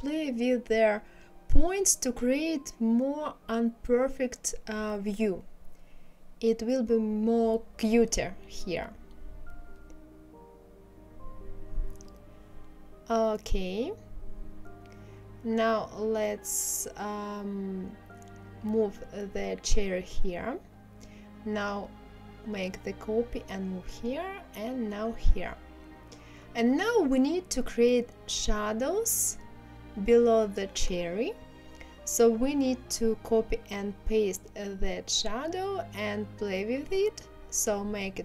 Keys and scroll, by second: 3.7 ctrl+z, 36.7 ctrl+z.